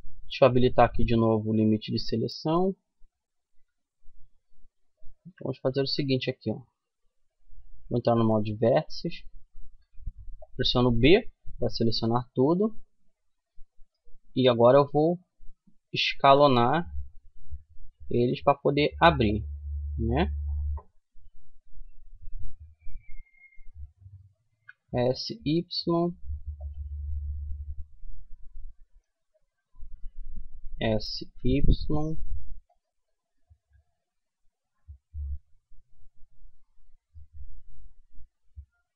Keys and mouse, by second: 2.7-4.5 middle drag, 4.5 a, 5.1 a, 7.4-9.2 drag, 9.2 b, 11.6 middle click, 12.0 middle click, 15.5 s, 19.3-21.2 middle drag, 22.2-24.4 middle drag, 23.8 s, 26.2 middle click, 28.0-29.0 middle drag, 30.0 s, 31.0 middle click, 32.4-34.3 middle drag, 35.3-38.9 middle drag.